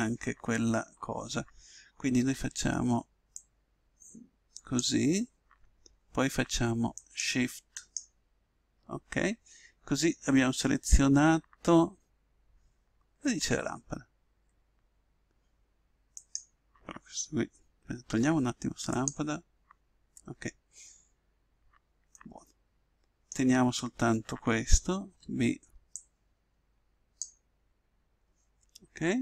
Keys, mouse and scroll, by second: 2.1 b, 6.9 right click, 13.8-17.7 middle drag, 16.1 right click, 18.1 x, 22.1-28.2 middle drag, 25.0 b, 28.8-29.2 middle drag.